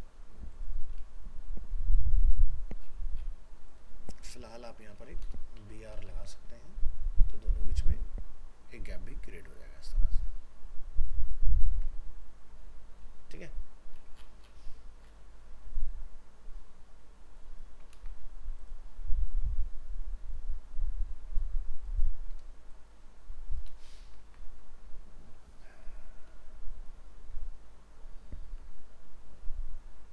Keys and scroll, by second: 5.7 ctrl+s, 6.2 alt+Tab, 11.7 alt+Tab, 17.9 ctrl+c, 23.7 ctrl+v.